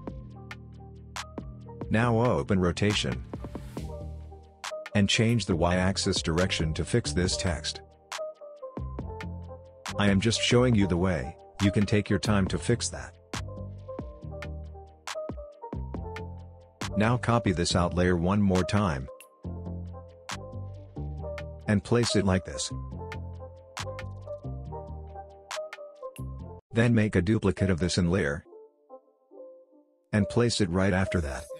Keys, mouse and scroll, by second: 2.4 click, 4.3 space, 4.4-5.0 click, 4.8 space, 6.9-10.1 drag, 14.5 scroll up 1, 14.8-15.1 scroll down 1, 15.1 space, 15.2-15.8 click, 15.6 space, 16.5 click, 18.1 ctrl+d, 19.2-20.4 drag, 27.8 ctrl+d, 28.5-29.4 drag, 30.6-31.5 shift+click.